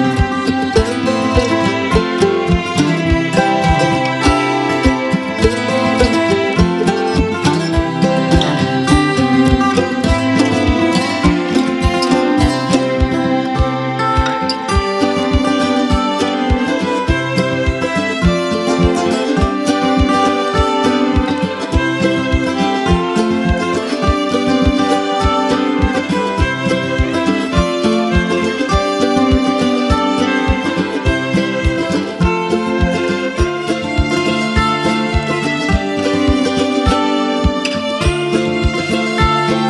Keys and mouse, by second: 1.4 space, 1.6 click, 1.9 space, 2.3 click, 2.5-3.0 space, 4.4 click, 4.5-7.4 typing, 5.2 click, 5.4 click, 6.2 click, 6.8 click, 7.7-8.3 drag, 11.1 space, 11.4 click, 11.6-12.0 space, 12.5-14.7 drag, 14.7 space, 14.9 click, 15.1-15.5 space, 15.9-16.9 drag, 18.1 ctrl+z, 18.6 space, 18.8-19.4 click, 19.4 space, 19.9 click, 22.2 ctrl+j, 23.5-24.1 drag, 24.9 ctrl+z, 26.6 Delete, 27.6 click, 29.6-30.5 drag, 32.4 l, 34.9-36.6 drag.